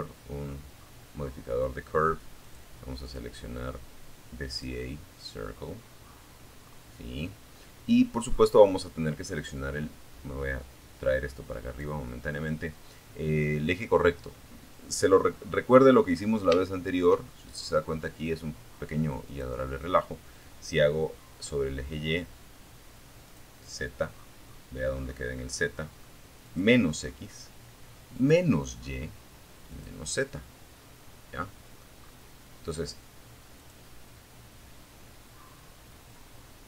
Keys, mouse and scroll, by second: 0.6 click, 1.2 click, 2.6 click, 3.9-4.4 scroll down 1, 4.8-5.2 scroll up 1, 6.4-6.8 scroll down 1, 7.6 click, 8.1-10.2 drag, 13.3 middle click, 14.2-14.8 scroll up 1, 14.8 shift+middle click, 15.5 shift+middle click, 17.4 click, 21.4 click, 22.3-22.9 scroll down 4, 23.2-23.5 scroll up 2, 24.6 click, 26.4 click, 27.9 click, 29.2 scroll down 1, 29.6 middle click, 30.2-30.6 scroll up 1, 31.8 click, 35.0 click.